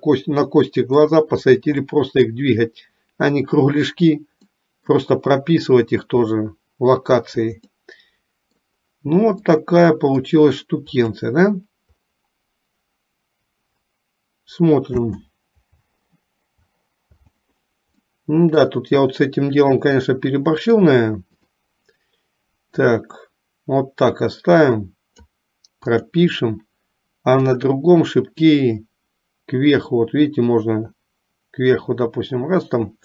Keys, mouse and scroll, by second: 0.7 middle click, 2.0 middle click, 4.7 middle click, 7.8-8.8 middle drag, 9.6 middle click, 11.2 click, 18.3 middle click, 21.5 click, 22.8-25.3 drag, 26.1 click, 27.7 click, 28.5-33.0 drag.